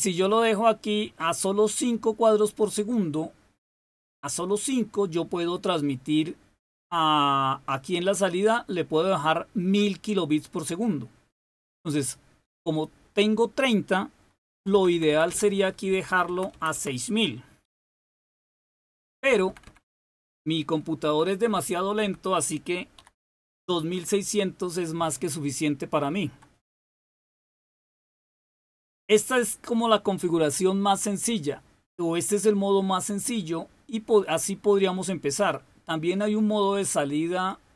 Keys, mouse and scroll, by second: 0.2 click, 1.1 click, 7.6 click, 8.3-10.4 drag, 14.4 Left, 14.6 Left, 14.8 Left, 15.0 Left, 15.4 Left, 15.8 Delete, 16.1 Right, 16.4 Right, 16.6 Right, 17.5 0, 19.2 Left, 20.2 Left, 20.4 Left, 20.7 Left, 21.4 Delete, 21.9-23.4 Delete, 22.6-23.9 typing, 37.3 click.